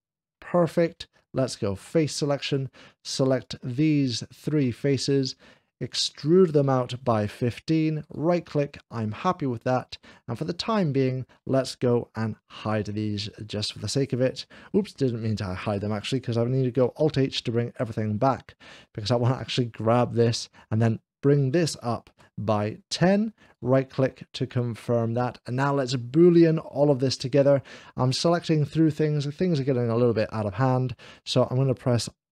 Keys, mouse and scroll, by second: 0.1 middle click, 1.8 3, 2.3 click, 3.5 shift+l, 4.0 shift+click, 4.4 shift+click, 5.1-7.4 drag, 8.1 right click, 8.7 middle click, 9.2 click, 9.2 scroll down 1, 10.7-11.7 middle drag, 12.6 h, 17.0 alt+h, 17.0 click, 19.1 click, 19.4 h, 20.4-22.9 drag, 22.4 alt+h, 23.3-24.5 right drag, 24.5 middle click, 29.6-30.6 middle drag.